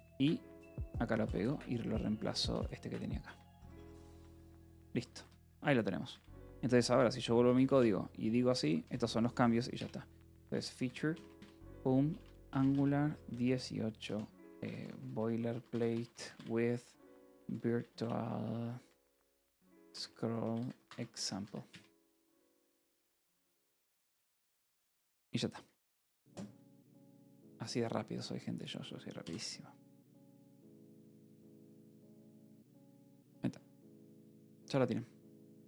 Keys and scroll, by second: 0.0-1.4 typing, 2.2 Escape, 2.5 d, 3.2 Escape, 3.8-6.1 typing, 4.0 Return, 7.4-21.9 typing, 23.3 shift+p, 29.9 ctrl+r.